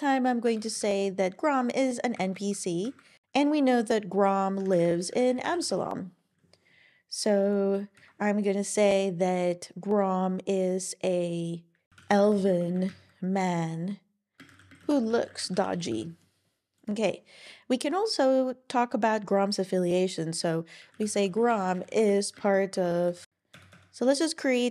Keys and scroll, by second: 0.6 shift+n, 1.8 typing, 2.2 Down, 2.3 Down, 2.8 super+Right, 4.4-5.6 typing, 7.5-8.2 typing, 11.6-13.0 typing, 14.2-15.3 typing, 17.9 typing, 20.7-21.7 typing, 23.0-23.8 typing.